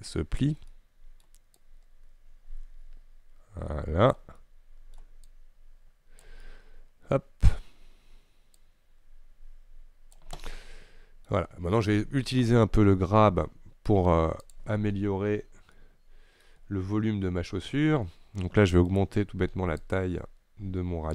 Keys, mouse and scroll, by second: 0.8 middle click, 1.6-4.5 drag, 4.5 middle click, 5.3-6.6 drag, 6.6-7.6 middle drag, 7.6-8.6 scroll up 1, 8.6-10.5 drag, 10.5 middle click, 11.5-14.6 scroll down 2, 14.6 click, 15.2-15.9 scroll up 3, 15.9 middle click, 16.7-20.1 scroll down 2, 20.1-21.1 right drag.